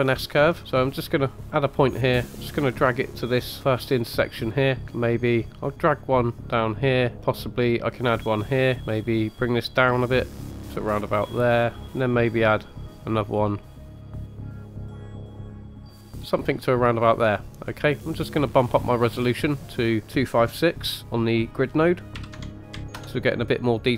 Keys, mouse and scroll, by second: 0.0-0.6 scroll up 3, 1.5-3.6 drag, 5.2-7.1 drag, 7.8 click, 9.3-11.8 drag, 12.6-13.8 drag, 14.1 click, 14.2 click, 14.5 click, 14.8 click, 15.1 click, 15.7 click, 16.0 scroll up 2, 16.1 middle click, 17.4 scroll down 3, 17.9 middle click, 18.6 scroll up 1, 19.4-23.0 drag, 23.0-23.7 middle drag.